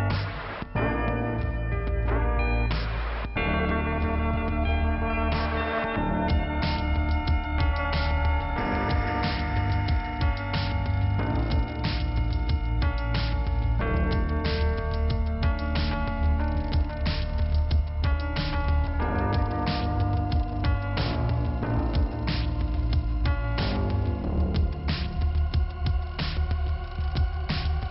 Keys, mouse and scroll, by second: 1.1 click, 2.3 click, 2.7 click, 4.4 click, 4.8 click, 4.9 double click, 5.3 double click, 6.4 click, 7.8 click, 7.9 click, 8.4 click, 9.7 scroll up 1, 11.4 scroll down 1, 12.5 scroll up 1, 14.3 click, 14.8 click, 15.1 click, 15.2 click, 16.9 click, 17.7 scroll down 1, 19.4 click, 22.6 click, 27.4 click.